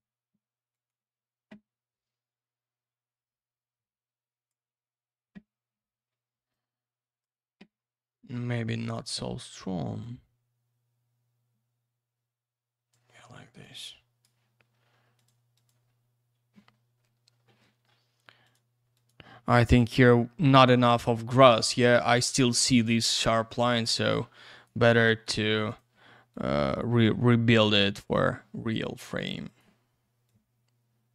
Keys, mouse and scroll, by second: 0.7 click, 0.9 click, 2.4 click, 6.5 click, 8.8 click, 8.9 click, 10.0 click, 13.6 click, 15.1 click, 15.2 click, 15.5 click, 15.6 double click, 18.4 click, 18.5 click, 18.9 click, 19.1 click, 23.8 click, 25.2 ctrl+я, 25.7 click, 25.8 click, 26.3 click, 28.0 click, 28.1 click, 29.5 click, 29.6 click, 30.3 click.